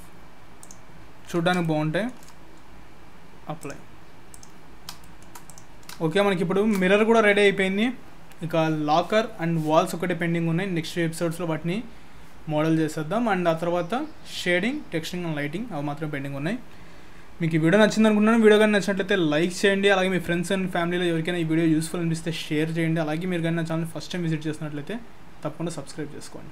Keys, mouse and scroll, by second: 0.6 click, 0.6 scroll down 5, 1.6 shift+middle click, 3.6 click, 4.7 scroll down 3, 5.0 shift+middle click, 5.4 click, 5.9 shift+scroll down 1, 6.1 shift+middle click.